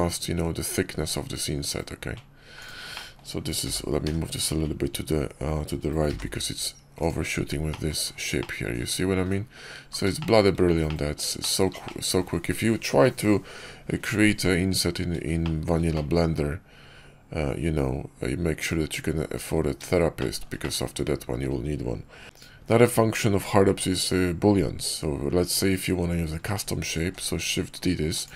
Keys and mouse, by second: 2.8 middle drag, 3.5 g, 7.6 middle drag, 8.3-9.6 middle drag, 10.0 shift+middle click, 10.7-11.1 middle drag, 11.3 shift+middle drag, 11.7-12.1 drag, 15.3 shift+drag, 15.8-19.4 drag, 20.1 shift+drag, 20.5-21.3 middle drag, 22.3 click, 26.8 shift+d.